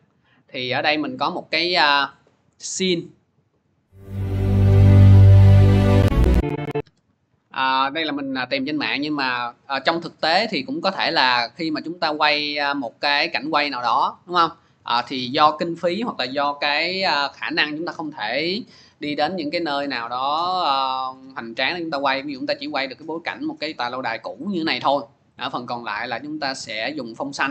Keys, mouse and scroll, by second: 0.2 click, 0.8 click, 1.1 click, 2.6 click, 2.8 click, 6.7 click.